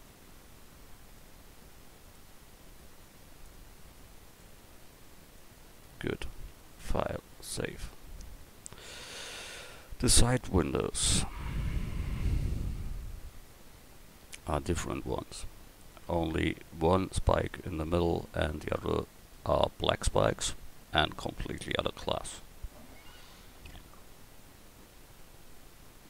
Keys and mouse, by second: 1.2 click, 2.0 right click, 3.9 right click, 3.9 a, 10.7 KP_1.